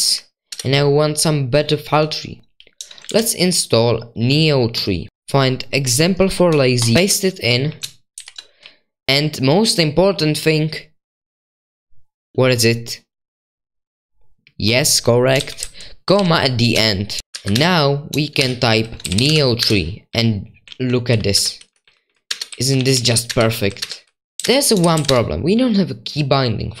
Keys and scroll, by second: 0.0-1.5 typing, 3.1 super+1, 3.1 typing, 6.7-9.6 typing, 17.2-25.6 typing.